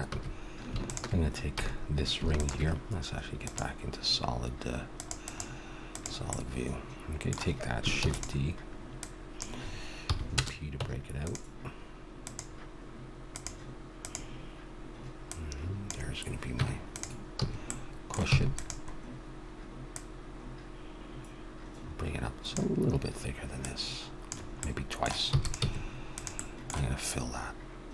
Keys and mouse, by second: 0.1 a, 1.6 a, 1.7 click, 1.9 click, 5.2-6.3 drag, 6.3-8.0 middle drag, 8.0 shift+d, 9.0-10.8 drag, 10.1 p, 10.8 Tab, 12.2-15.0 drag, 15.2-16.8 drag, 16.6 Tab, 17.0 click, 17.3 a, 18.3 e, 19.9-21.8 drag, 21.8 middle click, 23.6-25.3 drag, 24.6-26.6 middle drag, 25.3 e, 25.6 s.